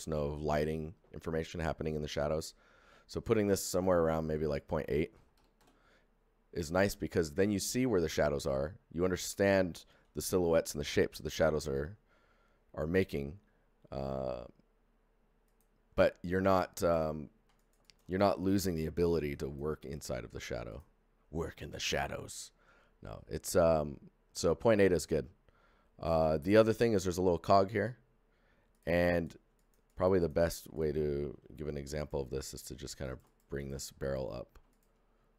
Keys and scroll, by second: 5.3 KP_8, 5.5 Return, 31.3 shift+d, 32.3 f.